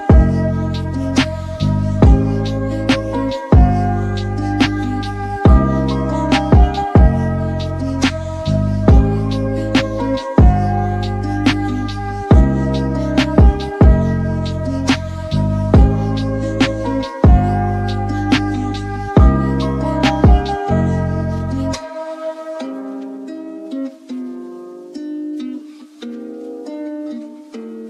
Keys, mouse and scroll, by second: 5.9 ctrl+alt+w, 8.7 scroll up 4, 23.0-23.8 scroll up 1, 24.4 scroll up 1, 24.7 alt+click, 24.9 alt+click.